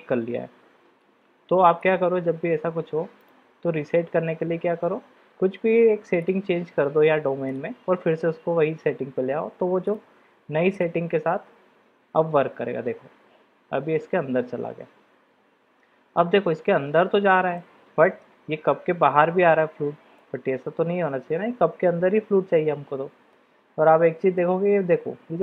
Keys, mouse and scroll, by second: 1.8 click, 3.2-4.2 drag, 7.6 click, 10.7 middle click, 17.8-18.4 middle drag, 20.5-23.6 middle drag.